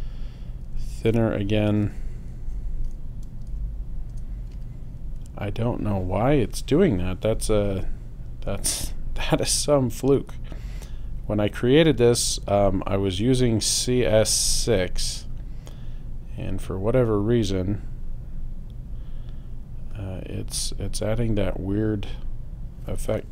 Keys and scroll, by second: 1.8 0, 2.4 l, 4.1 Return.